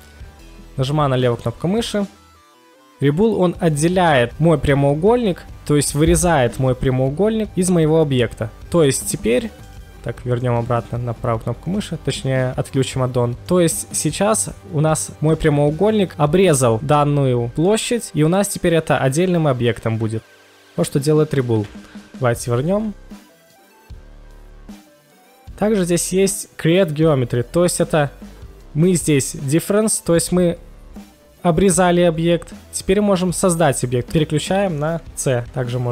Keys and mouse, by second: 1.4 shift+click, 2.0-2.6 middle drag, 8.8 click, 9.6 right drag, 19.1 g, 19.3 g, 19.3 z, 20.5 right click, 21.6 KP_1, 22.9 ctrl+z, 23.0 ctrl+z, 23.9 ctrl+shift+x, 32.7-33.7 middle drag, 34.0 KP_1.